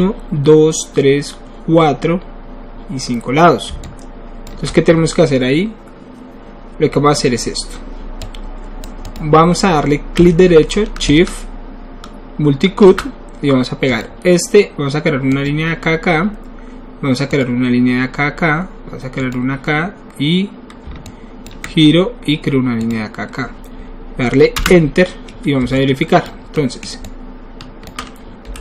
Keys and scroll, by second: 24.6 Return, 28.4 alt+w.